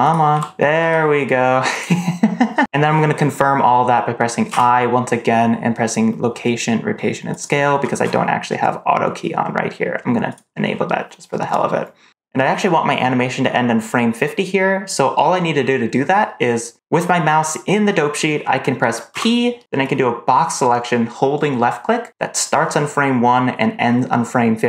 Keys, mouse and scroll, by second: 0.2 n, 0.7 r, 4.4 i, 10.2 click, 19.0 p.